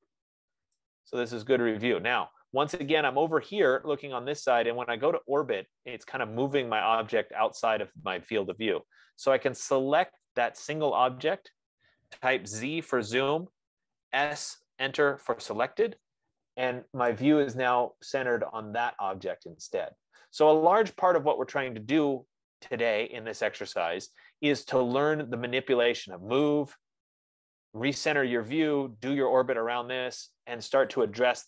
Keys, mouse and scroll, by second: 0.8-1.4 scroll, 9.0 right click, 10.7 click, 13.1 z, 14.3 s, 17.1 scroll, 20.7 right click, 22.7-26.0 right drag, 29.1 right click.